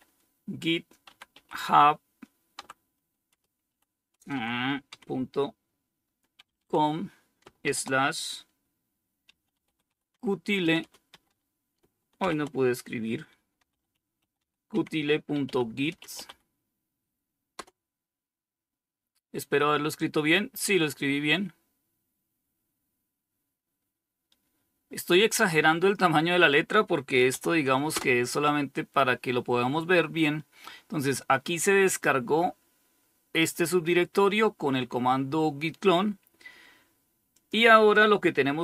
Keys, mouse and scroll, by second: 0.0-0.6 typing, 1.8-4.2 typing, 5.4-6.9 typing, 8.2-17.3 typing, 26.2-27.0 typing, 27.1 Return, 31.2-32.7 drag, 36.6 click.